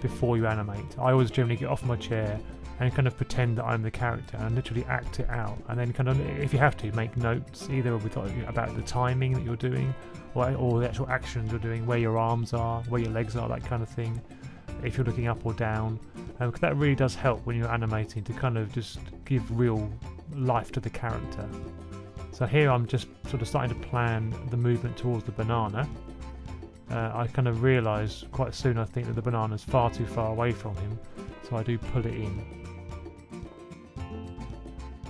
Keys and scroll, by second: 3.4-4.3 typing, 6.3 F6, 7.6 2, 10.1 1, 11.0 2, 14.3 1, 18.8 F6, 22.3 super+c, 22.6 super+v, 23.4 super+c, 23.6 super+c, 23.9 super+v, 24.4 o, 25.7 o, 26.4 super+c, 26.5 super+v, 26.8 super+v, 27.8 super+c, 27.9 super+v, 28.0 super+v, 30.4 b, 31.1 2, 31.4 2, 31.8 super+c, 32.0 super+v, 32.6 super+v, 33.2 super+v, 33.3 super+v, 33.5 super+v, 33.6 super+v.